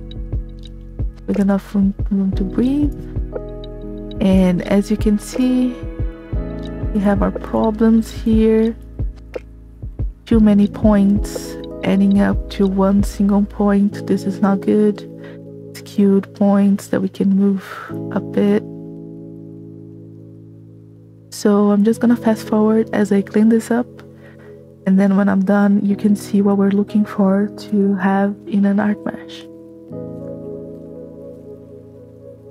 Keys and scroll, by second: 3.4 space, 29.8 space, 30.5 b, 31.3 space.